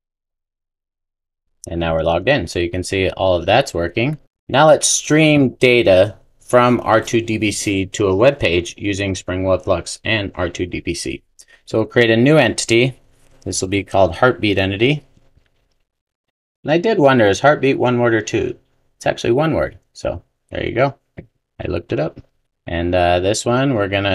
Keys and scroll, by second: 13.6 super+n.